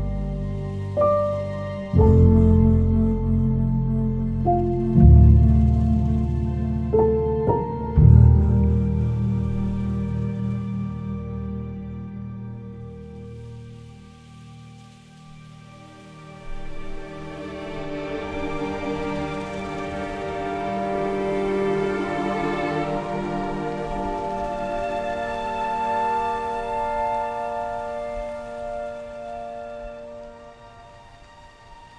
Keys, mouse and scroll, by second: 0.8 space, 0.8 f, 4.8 f, 4.8 space, 13.9 space, 15.1-16.0 typing, 19.5-20.7 typing, 22.1 w, 22.4 space.